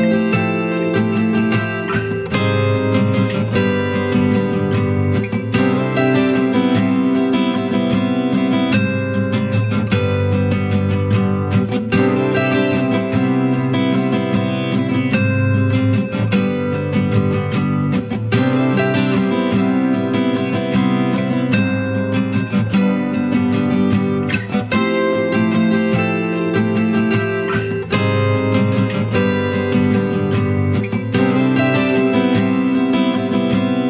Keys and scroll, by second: 19.0-20.0 typing.